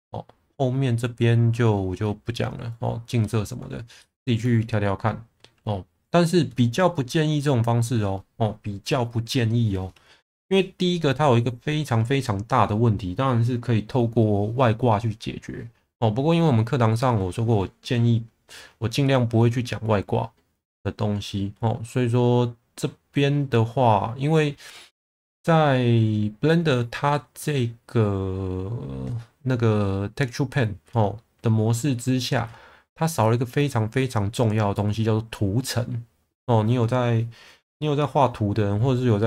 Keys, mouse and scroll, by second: 4.1 shift+middle click.